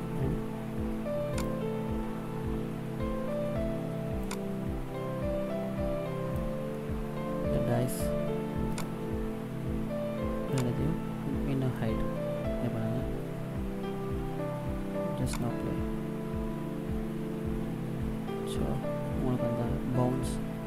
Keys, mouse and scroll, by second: 1.4 right click, 4.1 click, 6.6 middle click, 8.7 shift+right click, 9.3-9.7 scroll down 1, 10.4 click, 15.1 click.